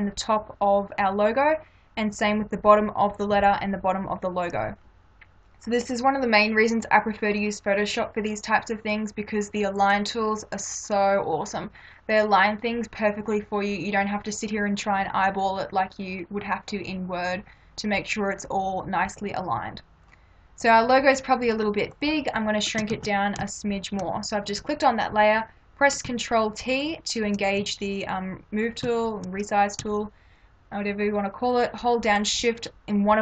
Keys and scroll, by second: 22.9 ctrl+t.